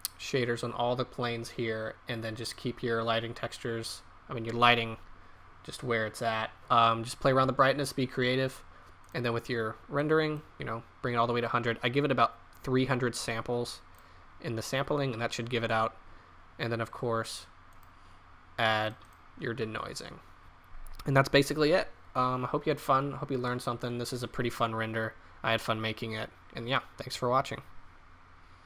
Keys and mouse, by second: 9.0-15.9 drag, 23.4-25.3 middle drag, 25.4-27.8 middle drag.